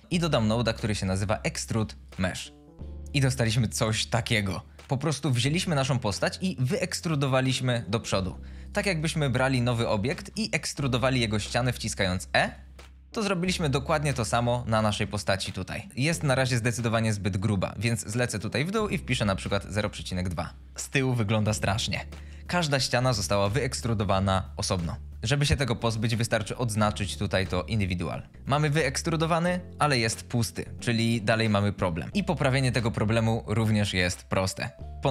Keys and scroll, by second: 0.0 x, 0.9 Return, 8.1 shift+a, 9.1 g, 10.5 Tab, 10.8 3, 11.9 e, 13.8 Tab, 14.1 x, 19.0 KP_0, 19.4 ., 19.6 KP_Decimal, 19.7 KP_2, 19.9 Return.